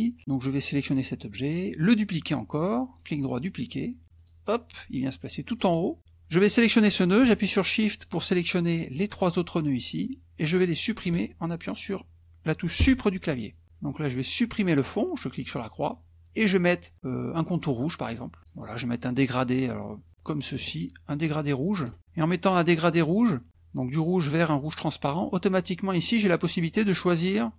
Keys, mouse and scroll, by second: 0.7 click, 1.0-2.9 middle drag, 2.9 right click, 4.1 click, 6.5 click, 8.0 shift+click, 9.1 shift+click, 10.7 shift+click, 12.8 Delete, 15.4 click, 18.0 click, 20.1-21.9 drag, 26.1 click.